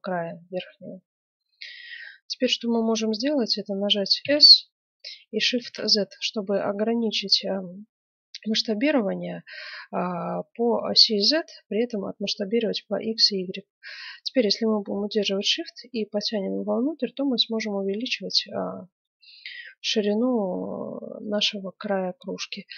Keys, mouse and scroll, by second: 4.2 s.